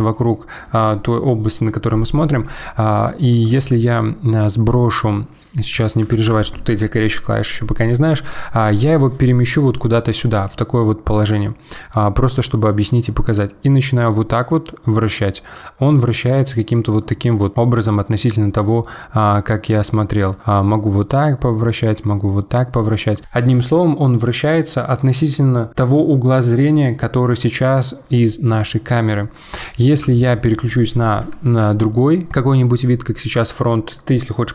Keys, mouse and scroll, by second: 3.7 alt+r, 6.1 alt+g, 9.5-12.6 middle drag, 12.6 click, 15.4-17.5 middle drag, 20.3 click, 21.1-22.4 middle drag, 22.4 click, 28.9-29.9 middle drag, 29.9 KP_1, 31.4 alt+r.